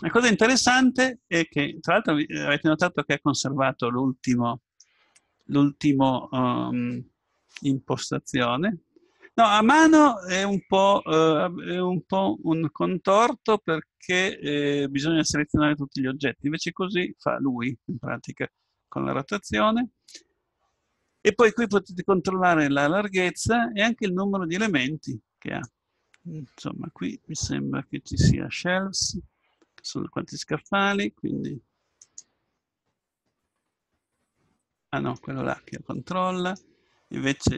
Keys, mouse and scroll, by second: 1.9-4.1 middle drag, 22.0-23.6 drag, 30.5-33.8 drag.